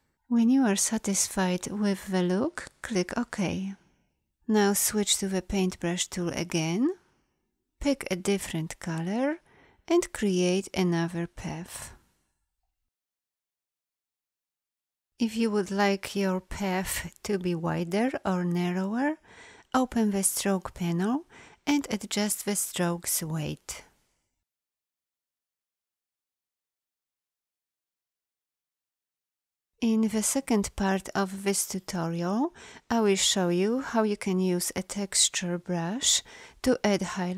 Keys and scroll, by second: 5.5 b.